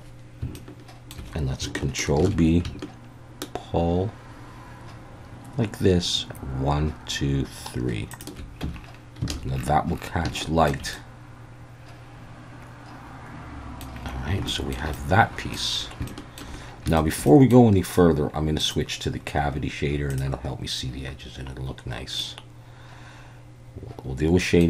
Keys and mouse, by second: 0.5 shift+middle click, 2.2 ctrl+b, 8.1 shift+click, 8.6 Tab, 9.3 alt+a, 10.4-10.7 shift+middle drag, 10.9-13.8 middle drag, 14.5 shift+middle drag, 14.9-15.5 middle drag, 16.1-16.4 shift+middle drag, 17.0 shift+middle click, 17.3 middle drag, 18.6-20.5 drag, 22.2-24.6 middle drag.